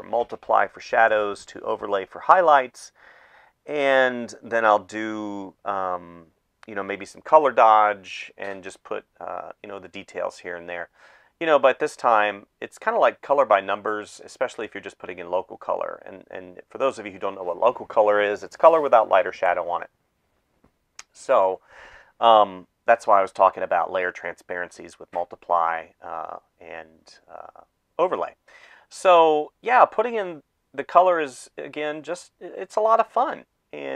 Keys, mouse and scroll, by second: 0.7-3.9 typing, 2.7 ctrl+z, 7.6 space, 8.6 space, 10.6 space, 14.2-16.8 typing, 18.5 space, 20.1 space, 23.3 space, 23.8 ctrl+s, 25.0 space, 27.7 space, 28.5 space, 29.3 space, 30.0 space, 32.0 space, 32.6 space, 32.8 space.